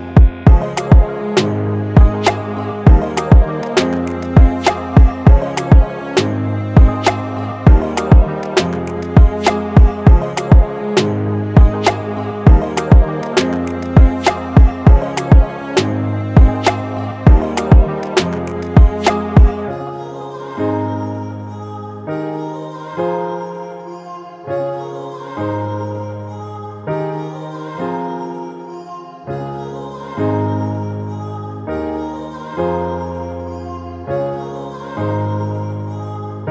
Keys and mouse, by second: 2.8 click, 4.8 click, 6.9 click, 7.7-13.0 shift+drag, 13.0-15.6 drag, 18.8 click, 20.0 click, 22.7 click, 27.2 ctrl+Num_Lock, 27.2 click, 28.6 click, 31.5-36.5 drag.